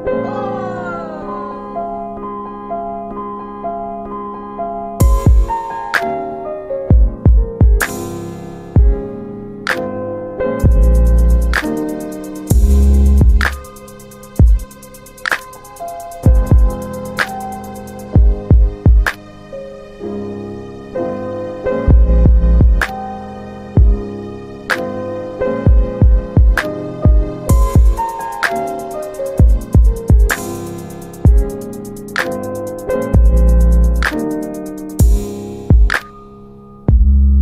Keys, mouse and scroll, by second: 1.0 click, 1.9 scroll down 1, 2.3 F4, 3.5 alt+middle click, 5.1 middle click, 5.2-5.5 scroll down 2, 6.6 middle click, 7.9 click, 8.3 F4, 10.3 click, 12.6 middle click, 13.3 alt+middle click, 13.6 middle click, 14.9 ctrl+alt+middle click, 16.8 click, 20.7 shift+click, 23.1 click, 25.1 alt+middle click, 25.7 alt+w, 27.2 click, 29.4 click, 31.6 alt+middle click, 32.1 ctrl+alt+middle click.